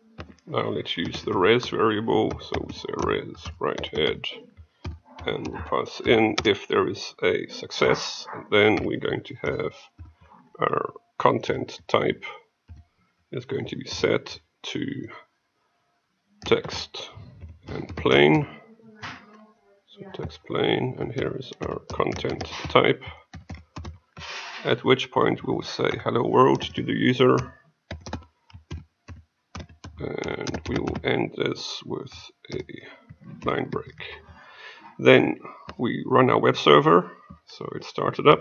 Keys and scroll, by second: 33.3 ctrl+;, 35.7 F6.